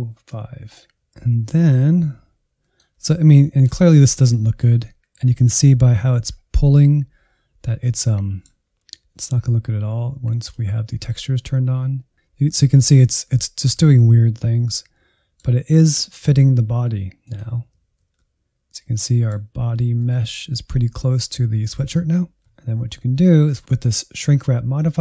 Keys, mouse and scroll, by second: 1.0-3.0 middle drag, 3.0-3.5 scroll down 3, 3.5 shift+middle click, 3.9 Insert, 4.3 middle click, 4.9 Insert, 5.2-6.0 scroll up 3, 6.0-10.0 shift+middle drag, 10.0-11.9 drag, 12.1-13.3 scroll up 1, 13.3 middle click, 14.2-14.5 scroll down 1, 14.5-17.3 middle drag, 17.3 click, 17.8 alt+z, 18.2-19.9 middle drag, 19.9-22.4 drag, 22.4-25.0 middle drag.